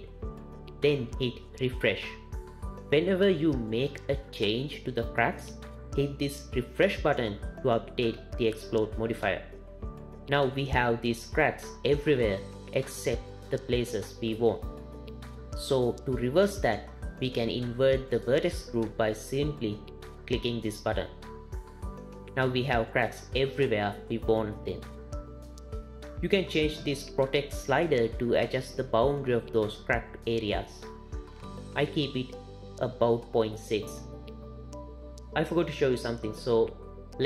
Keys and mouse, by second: 1.2 click, 12.5-13.3 middle drag, 21.4 click, 23.1 middle click, 28.2-33.2 drag, 33.4 click, 35.0 click, 37.1 click.